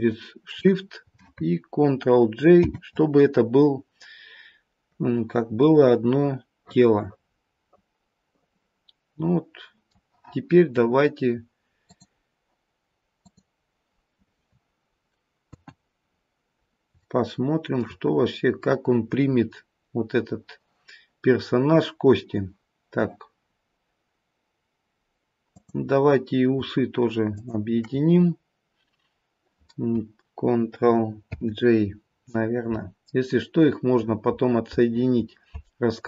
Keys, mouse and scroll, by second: 2.6 ctrl+j, 5.6 middle click, 13.2 click, 15.4 KP_1, 16.1-16.9 scroll down 1, 17.0 shift+middle click, 19.8-22.5 scroll up 1, 25.4 click, 27.3 shift+click, 31.4 ctrl+j.